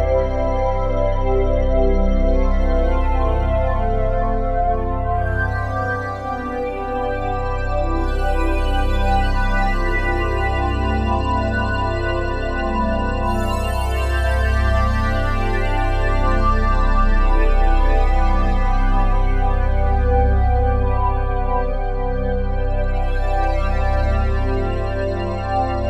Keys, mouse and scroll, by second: 1.2-2.0 typing, 3.9 Escape, 6.6 s, 8.9 shift+click, 9.6 i, 10.0 click, 11.2 click, 12.2-13.9 typing, 13.1 Return, 14.5 click, 15.8-17.0 drag, 17.2 space, 18.8 space, 19.2-21.3 drag, 19.5 space, 21.3 space, 22.6-25.8 drag, 25.3 typing.